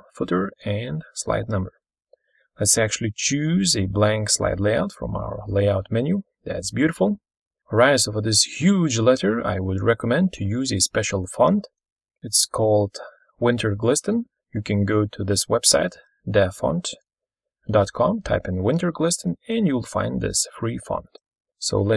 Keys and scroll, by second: 7.3 ctrl+super+Left, 12.1 ctrl+super+Right, 12.9 ctrl+Left, 19.7 ctrl+v, 20.1 ctrl+super+Left.